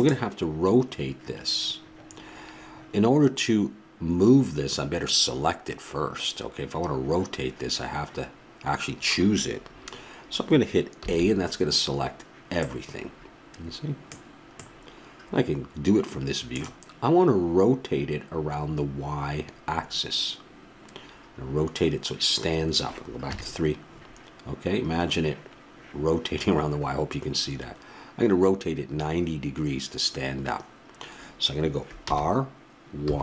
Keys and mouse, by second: 11.0 a, 12.6-18.9 middle drag, 23.3 KP_3, 32.0 r.